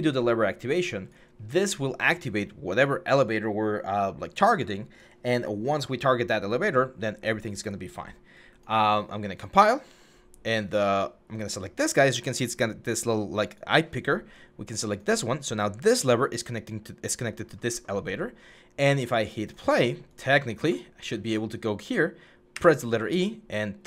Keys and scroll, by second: 20.8 w, 22.3 e.